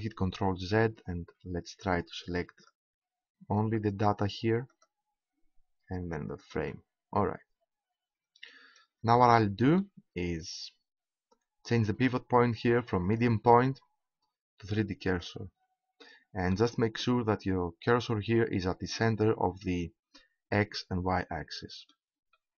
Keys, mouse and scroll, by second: 0.4 ctrl+z, 1.5-2.0 scroll up 1, 2.6 right click, 4.3 right click, 6.0-8.0 right drag, 8.0 middle click, 10.0-12.7 middle drag, 13.0-14.6 drag, 16.0-18.0 middle drag, 21.5-22.5 middle drag.